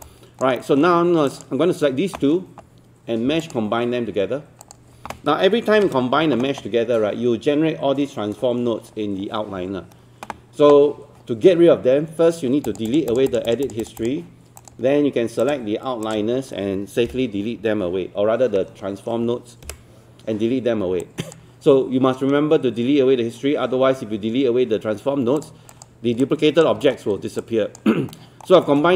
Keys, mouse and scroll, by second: 0.0 alt+click, 0.6 alt+middle click, 1.3-5.7 drag, 5.8 ctrl+space, 12.7 click, 15.4 shift+click, 16.1 ctrl+click, 19.7 Delete, 21.0 alt+click, 26.2 alt+click, 26.8 alt+middle click, 27.4 alt+click, 28.1 alt+middle click, 28.6 alt+middle click.